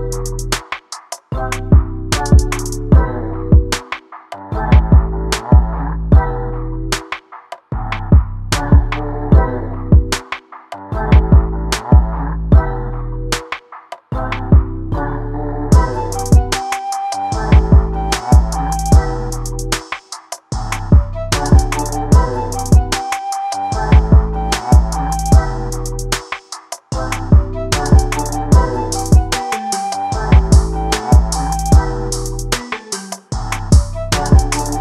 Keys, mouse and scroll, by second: 0.8 middle click, 1.2 scroll up 3, 1.3 click, 1.8 x, 2.5 2, 2.7-3.8 drag, 3.8 KP_7, 4.5 click, 5.6 s, 6.4 e, 7.5 s, 7.8 click, 8.5 click, 8.8 s, 9.3 click, 9.6 s, 11.1 click, 11.9 s, 12.3 click, 14.6 e, 16.7 s, 17.2 click, 18.0 middle click, 18.8 scroll up 3, 19.3 f, 19.4 scroll down 1, 19.5 shift+middle click, 19.6 scroll up 1, 19.7 middle click, 20.0 click, 21.4 click, 22.8 s, 23.3 scroll down 1, 23.4 middle click, 24.2 KP_7, 24.5 scroll down 1, 24.7 alt+z, 24.8-25.4 scroll up 3, 25.4 scroll down 1, 25.5 z, 25.8 scroll up 1, 26.0 scroll down 1, 26.3 click, 27.4-28.1 scroll down 4, 27.5 alt+z, 27.8 alt+a, 28.1 scroll up 1, 28.2 middle click, 28.4 click, 28.7 Tab, 29.0 scroll down 1, 29.0 click, 29.3 ctrl+space, 29.5 scroll up 2, 29.8 middle click, 30.4 KP_1, 30.7 shift+middle drag, 31.3 click, 32.1 alt+a, 32.3 click, 32.6 right click, 32.7 alt+a, 32.8 scroll down 2, 32.9 shift+middle click, 33.0 scroll up 2, 33.2-33.8 middle drag, 33.8-34.4 scroll up 1, 34.4-34.8 scroll up 1.